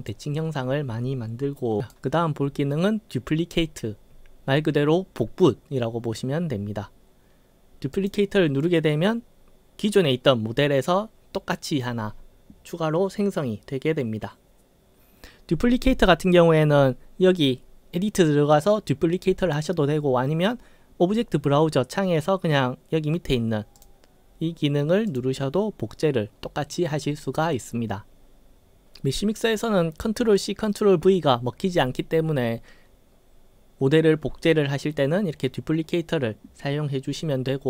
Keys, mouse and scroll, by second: 1.8 right click, 8.0 click, 23.8 click, 25.1 click.